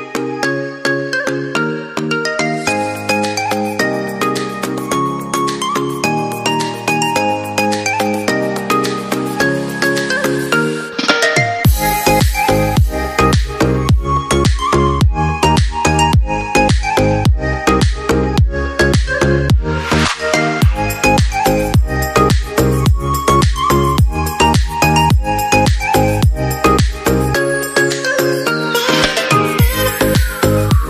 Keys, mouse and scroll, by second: 9.2 right click.